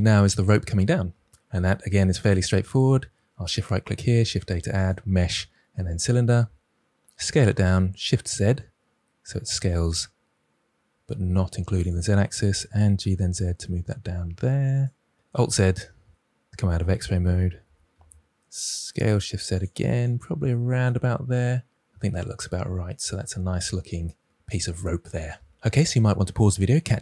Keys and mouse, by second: 2.1 shift+right click, 3.9 shift+a, 7.1 s, 7.5 shift+z, 11.7-12.6 drag, 12.6 g, 12.9 z, 14.7 click, 15.2 alt+z, 17.6 s, 17.9 shift+z, 19.5 click.